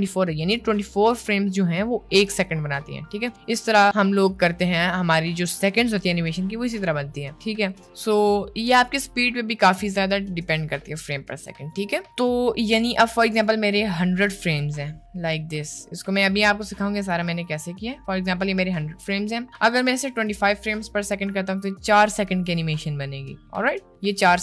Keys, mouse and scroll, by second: 1.1 click, 3.8-7.6 drag, 8.2 middle click, 14.9-17.2 drag, 18.1 middle click, 20.2 click.